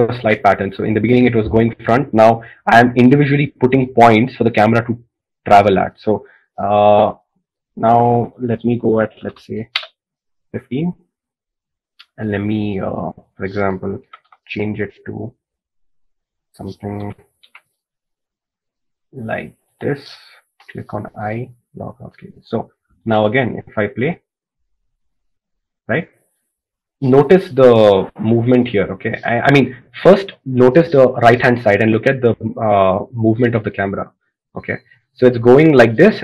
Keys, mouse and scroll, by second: 15.8 g, 18.1 g, 23.0 i.